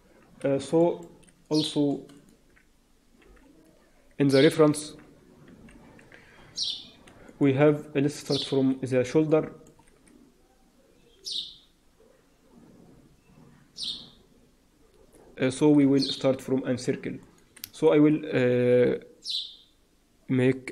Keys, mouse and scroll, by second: 0.0-0.4 scroll down 1, 0.7 shift+middle click, 2.0 click, 3.1 h, 5.4 alt+h, 5.8-7.0 scroll up 4, 7.0 scroll up 2, 7.2 shift+middle click, 7.8-8.2 scroll down 5, 8.6-9.2 scroll down 4, 9.2 shift+middle click, 15.3-15.8 scroll up 3, 15.9 shift+middle click, 16.2-17.2 scroll up 1, 17.2 click, 17.2-17.6 scroll up 2, 17.7 shift+right click.